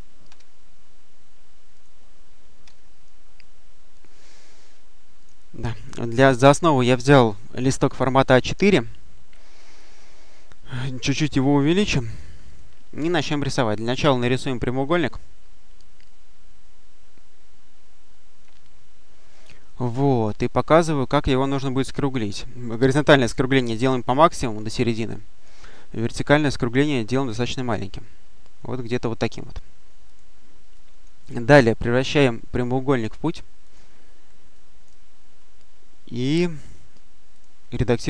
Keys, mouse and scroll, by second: 0.2 Delete, 1.6 click, 2.5 Delete, 5.1 click, 11.1 click, 12.0-13.4 drag, 13.8 click, 14.8-18.7 drag, 20.4 click, 21.7-23.7 drag, 25.5-29.4 drag, 30.0 click, 30.6 click, 32.0 click, 33.5 click, 34.4 click, 37.2 click.